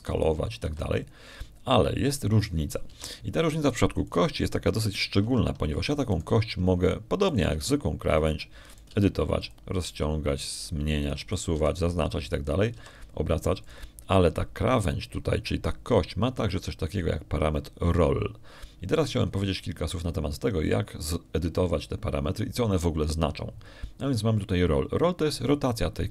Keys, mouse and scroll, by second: 0.4 shift+right click, 0.9 r, 1.4 shift+click, 2.2 s, 2.5 s, 2.9 shift+click, 4.7 Tab, 5.9 right click, 7.1 Tab, 8.0 right click, 9.1 right click, 9.4 g, 9.9 click, 10.5 right click, 10.7 g, 11.3 click, 11.6 g, 12.9 click, 13.2 right click, 13.4 g, 14.2 click, 14.6 r, 15.5 click, 21.1 middle click.